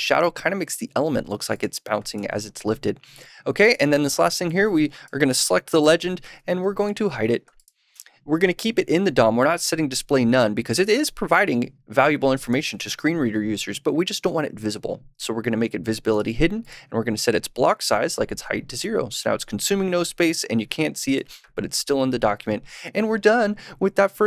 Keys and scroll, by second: 5.7 super+/, 6.4 super+s.